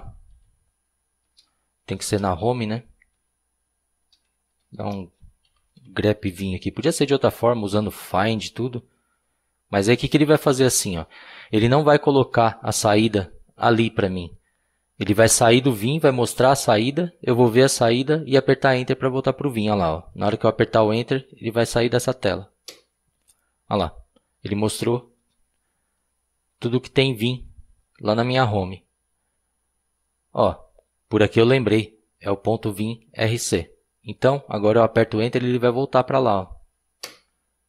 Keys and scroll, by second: 0.3-2.0 typing, 3.2-7.4 typing, 22.7 Return, 37.0 Return.